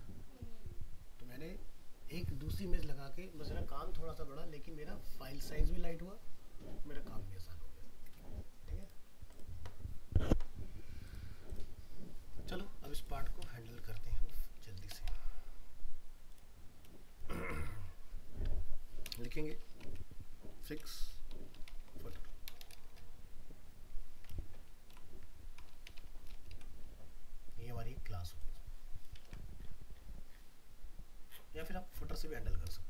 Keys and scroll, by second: 29.2 ctrl+c.